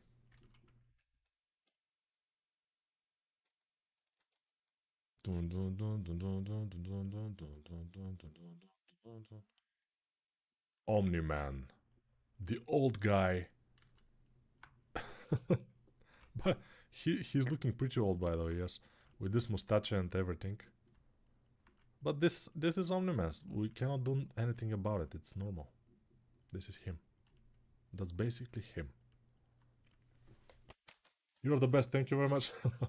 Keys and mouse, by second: 12.2-14.3 ctrl+alt+right drag, 13.5 alt+q, 14.7 g, 15.1-15.9 ], 23.4-29.3 ctrl+alt+drag, 29.3-32.8 right drag.